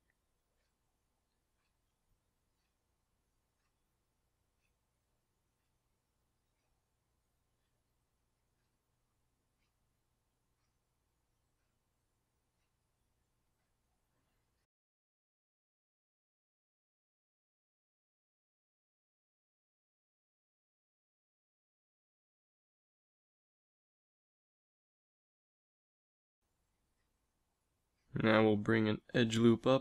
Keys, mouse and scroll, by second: 0.9 z, 2.3 g, 4.3 z, 5.2 ctrl+r, 6.7 z, 7.2 ctrl+r, 11.0 ctrl+r, 13.9 z, 15.3 a, 16.2 ctrl+r, 16.9 click, 18.5 a, 19.4 ctrl+r, 21.5 ctrl+r, 23.6 z, 24.9 g, 26.7 z, 27.3 ctrl+r, 27.8 z, 28.3 ctrl+r.